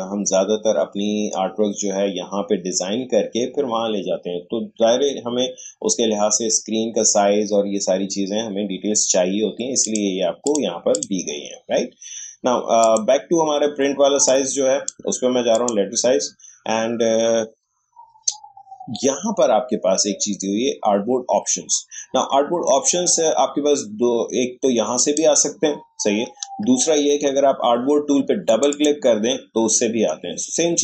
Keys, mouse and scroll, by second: 9.8-15.5 drag, 24.9 click, 26.4 Escape, 28.5 click.